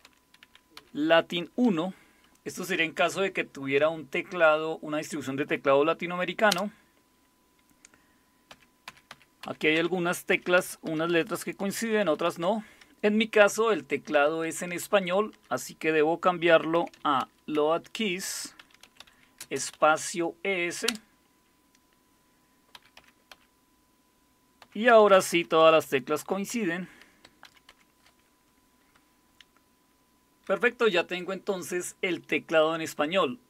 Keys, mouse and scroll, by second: 0.0-1.6 typing, 6.5 Return, 8.5-12.1 typing, 13.8-15.1 typing, 16.2-20.5 typing, 20.9 Return, 22.5-23.3 typing, 24.6-27.7 typing, 28.9-30.0 typing.